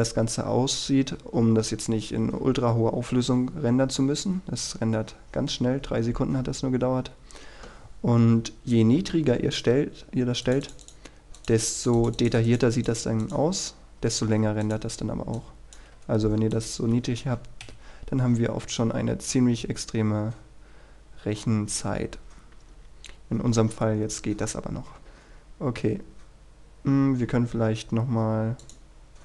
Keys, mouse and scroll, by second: 0.4-7.1 scroll down 1, 7.1 Escape, 8.9-10.4 drag, 10.6-14.4 drag, 16.1 KP_0, 16.7 click, 17.8 F12, 18.6-19.1 scroll down 1, 19.1 scroll up 1, 20.0-20.8 scroll down 1, 25.8-27.8 scroll up 1, 28.7-29.2 drag.